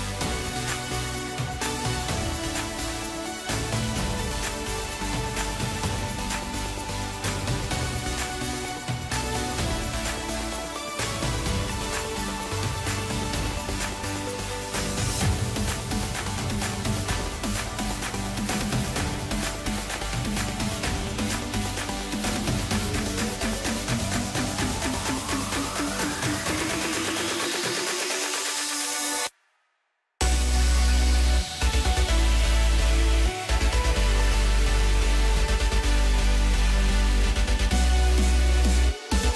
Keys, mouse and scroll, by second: 0.8-1.2 scroll down 2, 1.2-2.9 middle drag, 2.9 drag, 3.3-4.9 middle drag, 4.9 scroll up 1, 5.6 drag, 6.2-7.0 middle drag, 7.0 drag, 7.5-9.0 middle drag, 9.0-11.0 drag, 13.0-14.8 drag, 14.8-15.9 scroll down 5, 15.9-18.7 drag, 19.1-19.8 scroll down 2, 19.8 scroll down 1, 19.8 scroll up 2, 21.3-22.6 right drag, 22.6 scroll down 3, 23.4-25.0 middle drag, 25.0 scroll up 2, 25.8 click, 29.1-30.2 scroll down 1, 30.2-33.3 drag, 33.8-34.1 scroll up 2, 34.1 scroll down 2, 34.6-35.7 middle drag, 35.7 drag, 36.0 scroll up 1, 36.7 click, 38.4 shift+click.